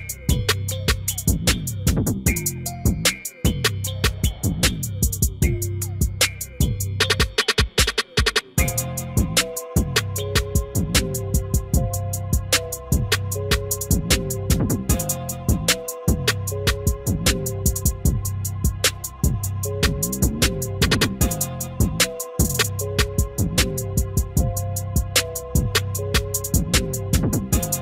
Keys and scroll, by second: 20.7 F4.